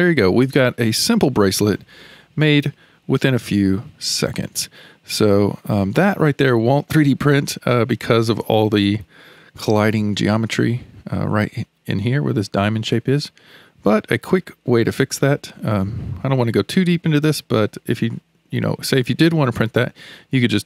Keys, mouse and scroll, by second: 0.6-1.1 scroll down 1, 1.1-1.8 shift+middle drag, 1.8 Tab, 2.4-6.2 middle drag, 6.2-6.5 scroll up 2, 6.5-8.3 shift+middle drag, 8.3 scroll up 3, 8.5-9.1 shift+middle drag, 9.1 scroll up 2, 9.4-10.0 middle drag, 10.0-10.6 scroll up 3, 10.6 alt+z, 13.3 alt+z, 13.8-14.3 scroll down 7, 14.3-14.9 shift+middle drag, 14.9-15.2 scroll down 2, 15.2-19.9 shift+middle drag.